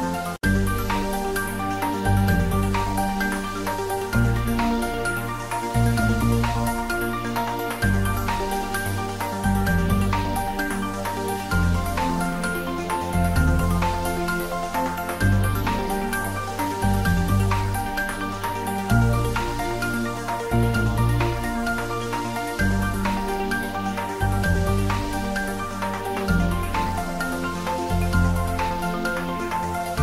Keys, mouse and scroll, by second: 0.4 click, 0.8 s, 1.2 y, 3.4 click, 3.7 g, 4.1 y, 5.9 click, 7.3-9.2 typing, 8.7 click, 9.7 click, 10.7-14.3 typing, 11.3 ctrl+middle click, 12.7 click, 16.3 click, 16.8 ctrl+s, 17.1-19.6 middle drag, 19.6 ctrl+s, 20.1 click, 20.4 ctrl+s, 21.3 click, 21.7-22.5 typing, 23.7 click, 24.4 ctrl+s, 24.6 click, 24.7 click, 25.8-26.8 typing, 26.7 click, 27.2 ctrl+s, 27.3 click, 28.2 ctrl+s, 29.1 click, 29.6-30.0 typing.